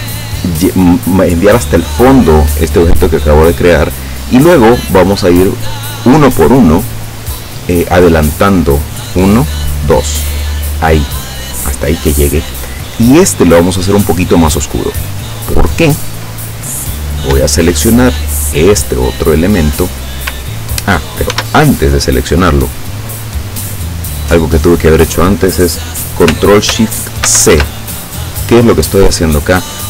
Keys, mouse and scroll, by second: 3.0 click, 8.6 click, 9.6 click, 14.5 click, 18.0 shift+click, 20.5 ctrl+scroll down 2, 21.4 ctrl+s, 22.5 click, 24.1 click, 27.3 ctrl+shift+c.